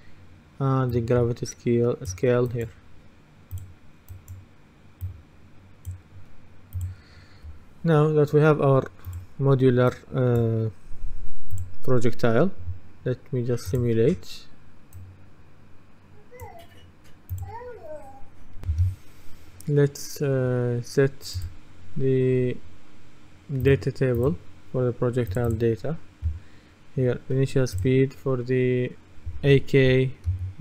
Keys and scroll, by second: 18.8 F10, 30.4 KP_5.